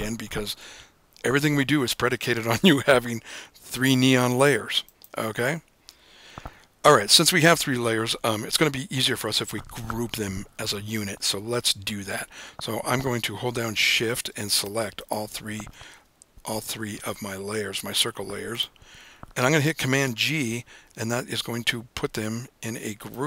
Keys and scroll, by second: 21.6 super+g.